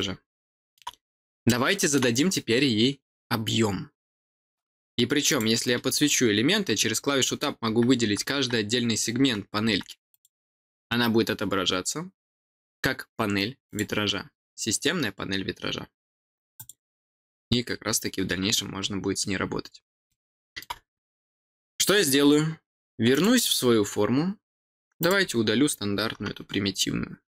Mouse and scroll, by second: 1.4 middle click, 2.2 scroll up 1, 5.2 click, 10.0 click, 13.6 click, 16.5 click, 16.9 click, 19.5 scroll down 1, 20.0 middle click, 23.0 click, 24.9 click, 27.2 click.